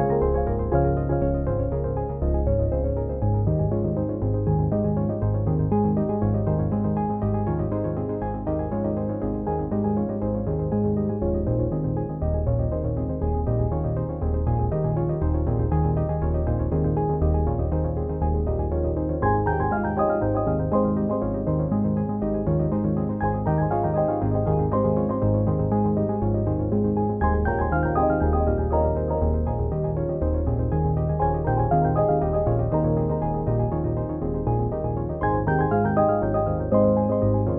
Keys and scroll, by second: 17.6 z.